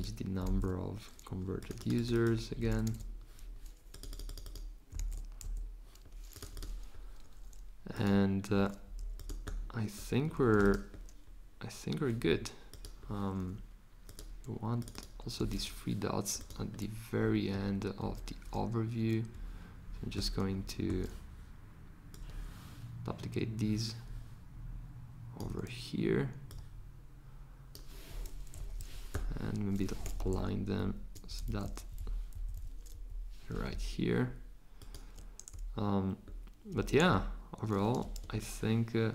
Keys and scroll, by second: 0.1-0.9 typing, 2.4-3.3 typing, 4.6-5.9 typing, 15.6 c, 18.0 v.